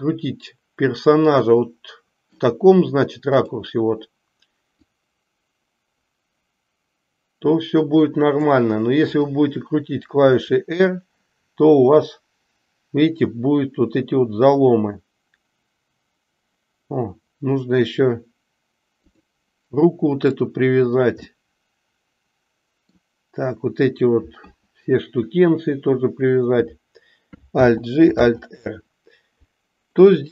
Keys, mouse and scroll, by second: 1.5-2.3 middle drag, 3.3 click, 4.6-8.5 drag, 10.2 r, 21.4-23.0 middle drag, 27.6 alt+g, 28.2 alt+r.